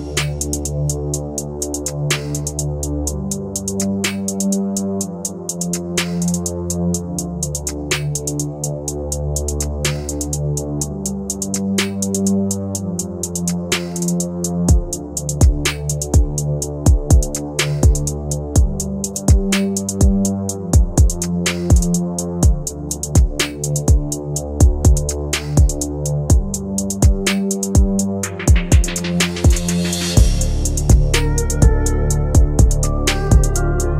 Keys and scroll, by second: 20.2 Delete, 26.9 g.